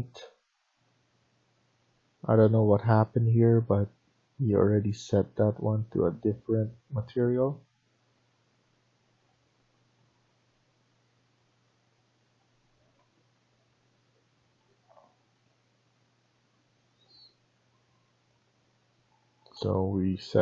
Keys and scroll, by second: 18.9 Escape, 19.3 Escape.